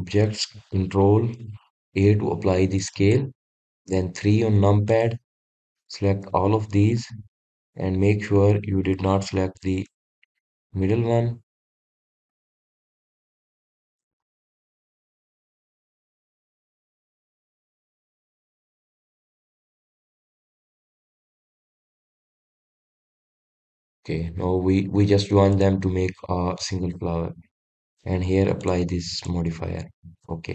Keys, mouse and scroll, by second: 2.9 ctrl+a, 4.2 click, 4.9 KP_3, 6.0 click, 7.5-8.6 middle drag, 8.6-10.5 scroll up 4, 11.2 shift+click, 11.8 shift+click, 13.2 shift+click, 14.1 shift+click, 15.3-15.8 scroll down 2, 16.8 shift+click, 18.0 click, 18.8-20.0 scroll up 2, 20.0 click, 20.6 scroll down 1, 21.6 shift+click, 24.1 ctrl+j, 25.0-26.5 scroll down 1, 26.6 click, 27.9 click, 29.7-30.5 drag.